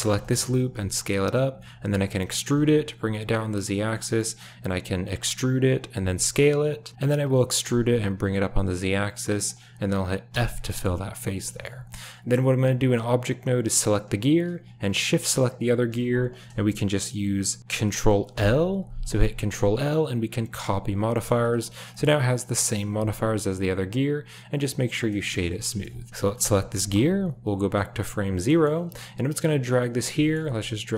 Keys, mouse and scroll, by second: 0.1 shift+drag, 0.6 s, 1.8 e, 4.0 click, 5.0 e, 7.1 e, 10.3 f, 10.7 middle click, 11.5 click, 11.6 Tab, 12.8 g, 15.3 shift+click, 18.2 ctrl+l, 21.1 shift+middle click, 21.4 click, 21.9 shift+click, 22.8 w, 25.2 shift+middle click, 25.4 a, 26.1 space, 26.2 click, 26.7 KP_7, 27.5-27.9 drag, 28.5 shift+click, 29.3 f, 30.2 click, 30.4 g.